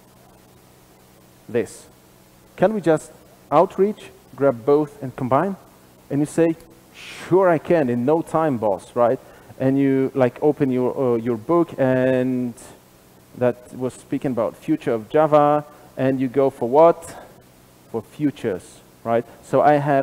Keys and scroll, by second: 10.3 super+/, 13.6 super+b.